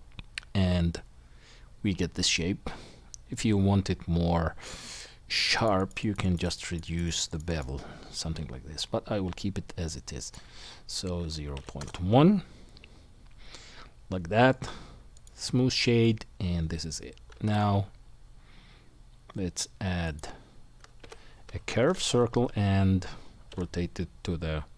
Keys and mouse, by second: 14.5-17.5 right drag, 17.3 shift+a, 21.0 r, 23.5 KP_1.